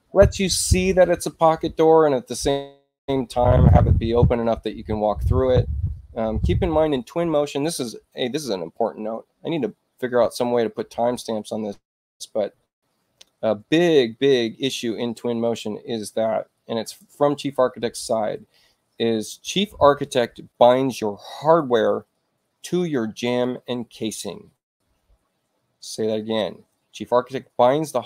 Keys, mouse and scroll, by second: 16.2 click.